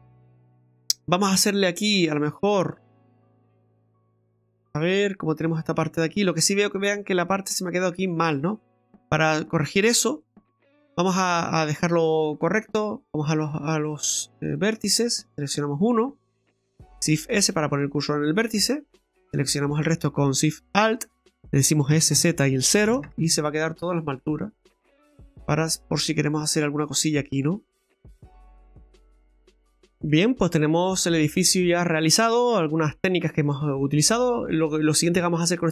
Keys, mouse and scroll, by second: 1.3 Tab, 1.5-2.0 scroll up 3, 2.0 right click, 2.3 Tab, 2.7 middle click, 3.6 right click, 4.0 Tab, 4.4 scroll down 1, 4.7 middle click, 5.7 middle click, 8.8 middle click, 10.8 Tab, 11.3 Tab, 11.7 right click, 12.7 click, 14.5 click, 15.5 right click, 17.2 shift+s, 19.0 alt+shift+right click, 21.9 s, 23.9 scroll down 1, 24.2 middle click, 26.1-26.4 scroll up 2, 27.1 middle click, 27.4 right click, 27.8 scroll down 2, 27.9 middle click, 30.5-31.0 scroll down 3, 31.0 middle click, 32.2 Tab, 32.6-33.3 scroll up 3, 33.4 Tab, 33.4 scroll up 1, 34.0 middle click.